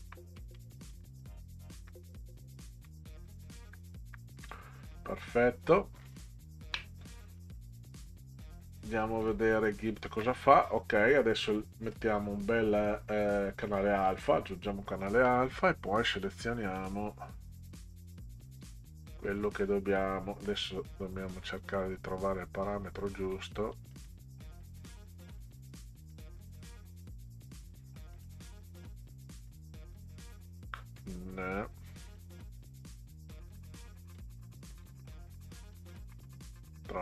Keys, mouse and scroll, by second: 0.0 shift+Left, 0.3 shift+Left, 0.5 shift+Left, 1.4 shift+Down, 1.6 shift+Down, 1.8 shift+Down, 3.1 shift+Down, 3.6 shift+Up, 4.1 shift+Up, 5.7 click, 6.5 ctrl+scroll down 2, 7.4 middle click, 9.2 click, 11.9 right click, 14.1 click, 16.3 click, 16.8 click, 23.3 click, 23.7 click, 24.0 click, 25.3 click, 26.1 click, 28.2 click, 30.9 click, 32.0 click, 33.3 click, 34.2 click, 35.1 shift+click, 35.7 shift+click.